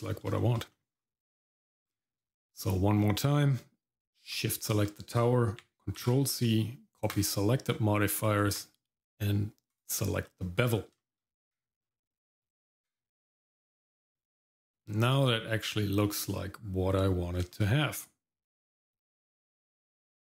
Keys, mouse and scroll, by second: 0.4 shift+middle click, 0.7 middle click, 0.9-1.4 scroll up 1, 1.4 middle click, 1.8-2.2 scroll down 1, 2.3 shift+middle click, 2.6 middle click, 3.0-3.6 scroll down 1, 4.3 shift+click, 6.2 ctrl+c, 10.2 middle click, 10.6-10.9 scroll up 1, 11.0 shift+middle click, 11.4 Tab, 11.8-12.1 scroll down 2, 12.2 shift+middle click, 12.8 Tab, 13.9 shift+middle click, 14.3 middle click, 14.8 shift+middle click, 15.3 middle click, 16.0 middle click, 17.5-18.8 shift+middle drag, 19.1 middle click.